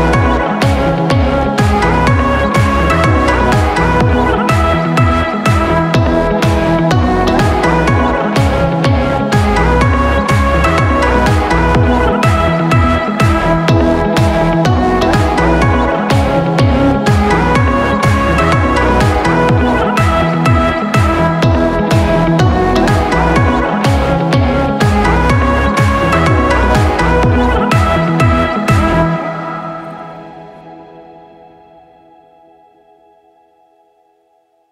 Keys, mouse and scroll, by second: 0.5 click, 2.4 click, 3.5 click, 6.0-6.4 scroll up 4, 6.2 middle click, 6.6-7.0 scroll down 1, 7.0 scroll up 1, 7.1 middle click, 9.7 scroll up 3, 9.9 middle click, 10.2-10.9 scroll down 5, 10.7 middle click, 10.9-11.7 scroll up 8, 11.6 middle click, 14.0 click, 15.1 click, 16.3-16.7 scroll down 7, 16.8 middle click, 17.7-18.1 scroll up 2, 18.1 middle click, 18.2-18.8 scroll down 4, 18.8 middle click, 20.4 click, 22.9-23.6 scroll up 3, 23.1 middle click, 24.1-24.4 scroll down 1, 24.4 middle click, 25.8 right click, 27.3 scroll down 2, 27.6 middle click, 28.1 scroll up 4, 28.3 middle click, 29.1-29.4 scroll down 4, 29.4 middle click, 30.3 middle click, 30.8 w, 32.7 click, 34.1 click.